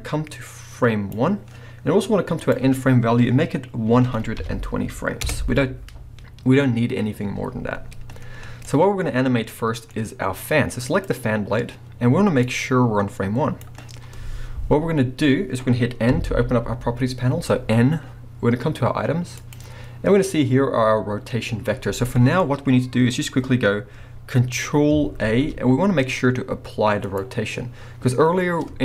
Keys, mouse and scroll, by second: 5.2 Return, 8.6 middle click, 9.0 scroll up 2, 9.5 middle click, 10.9 click, 12.5-19.5 drag, 16.1 n, 22.1-27.1 middle drag, 25.2 ctrl+a, 27.1-28.8 drag.